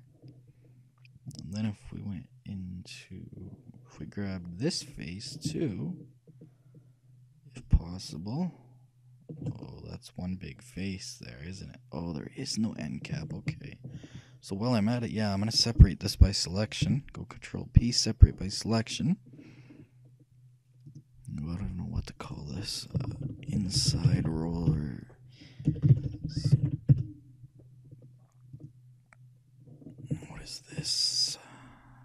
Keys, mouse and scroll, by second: 1.4-3.3 drag, 7.7-9.6 shift+right drag, 9.7-11.5 middle drag, 13.6 ctrl+z, 14.2-15.9 middle drag, 17.1 p, 20.1-24.3 middle drag, 21.0-24.6 drag, 26.5 l, 28.7-30.5 drag, 30.1-32.0 shift+middle drag.